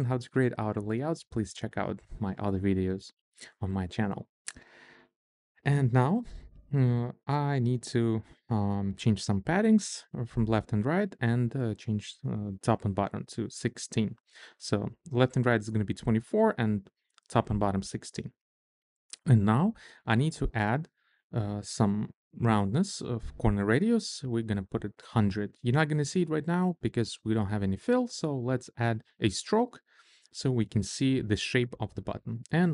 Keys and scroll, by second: 6.5 shift+a, 10.7-11.7 typing, 13.4 1, 13.8 6, 13.9 Return, 25.3-26.3 typing, 26.7 Return.